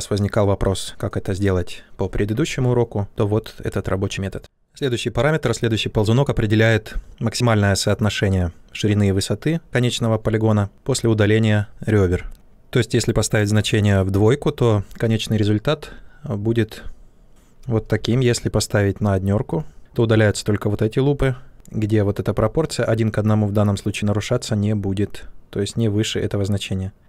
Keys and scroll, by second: 17.9 ctrl+z.